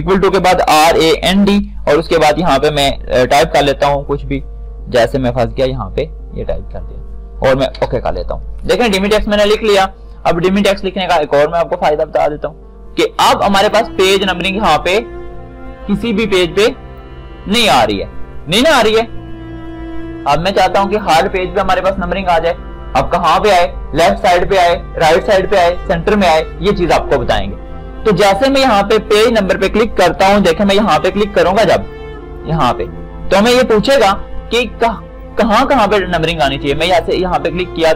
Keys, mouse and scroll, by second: 0.6-2.3 typing, 4.1-5.8 typing, 8.0 Return, 12.3-17.3 drag, 17.3-23.6 drag, 30.8 ctrl+shift+d, 37.1 shift+click.